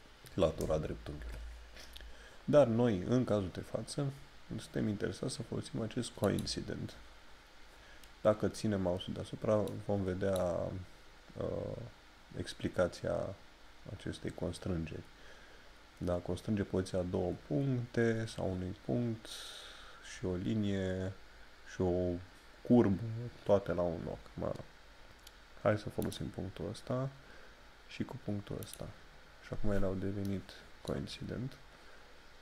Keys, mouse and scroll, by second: 6.2 click, 7.1 scroll up 1, 9.7 click, 26.0 click, 28.6 click, 32.0 middle click.